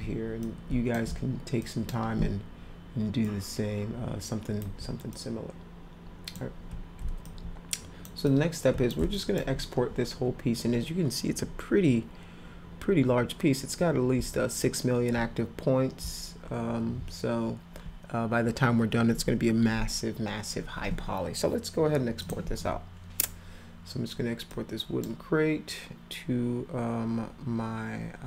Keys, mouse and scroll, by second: 0.4 click, 1.6 alt+click, 3.3-4.6 alt+drag, 5.1-6.4 drag, 7.2 alt+click, 8.3 click, 9.1 alt+click, 22.2 click, 24.5 click.